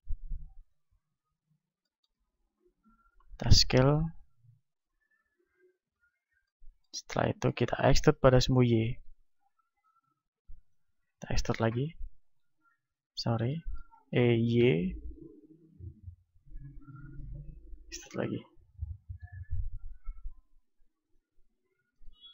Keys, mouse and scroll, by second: 0.7 click, 2.7-4.0 middle drag, 3.4 s, 4.3-8.3 drag, 6.7-9.1 middle drag, 8.3 e, 10.8-12.5 drag, 11.1 e, 12.8-14.5 drag, 13.1 ctrl+z, 14.1 e, 14.5-15.5 middle drag, 17.0-19.1 drag, 17.9 e, 21.2-22.3 drag, 21.8 Tab.